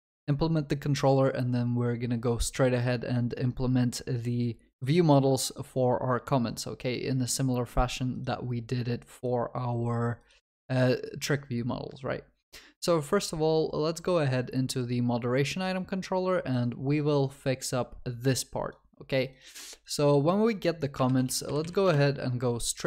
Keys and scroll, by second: 21.9 Return.